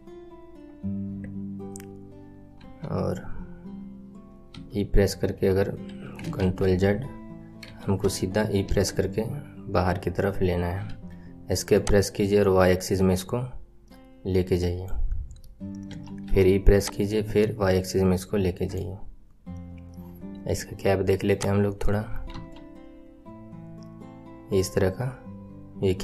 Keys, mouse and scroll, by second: 2.5 KP_1, 4.5 e, 6.3 ctrl+z, 7.6 KP_7, 8.6 e, 11.7 click, 15.8 e, 16.7 click, 21.2 click, 21.6-22.3 scroll down 5, 22.3 KP_1.